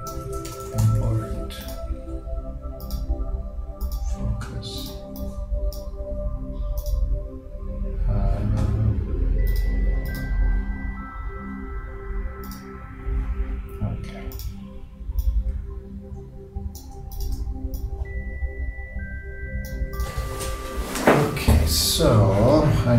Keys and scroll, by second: 0.2-1.1 typing.